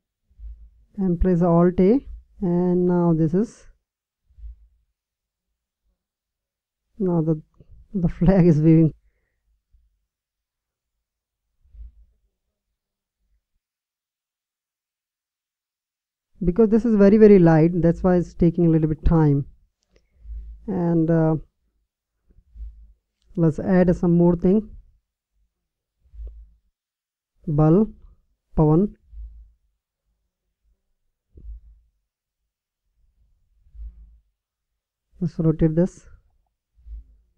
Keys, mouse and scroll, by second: 0.8-2.7 drag, 22.9-24.7 drag, 28.9-30.8 drag, 34.3-36.1 drag.